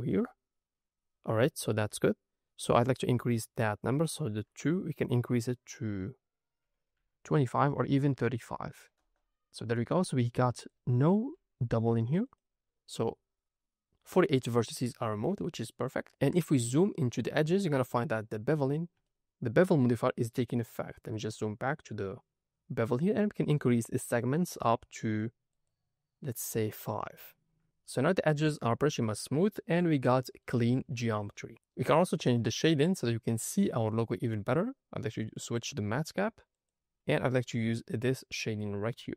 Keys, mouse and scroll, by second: 2.6-9.0 drag, 7.7 BackSpace, 10.5 click, 11.2 g, 12.2 right click, 14.8-15.2 scroll down 3, 16.0 ctrl+middle click, 16.6 ctrl+middle click, 18.9 ctrl+middle click, 20.8-21.3 scroll down 3, 21.3 scroll up 1, 23.9 click, 24.4 click, 24.9 click, 25.4 click, 27.0 scroll down 3, 27.6 scroll up 2, 27.7 middle drag, 28.3-28.8 scroll up 3, 29.6-30.0 scroll down 1, 30.0-30.9 middle drag, 31.0-31.4 shift+middle drag, 32.8-38.8 drag, 39.0 middle drag.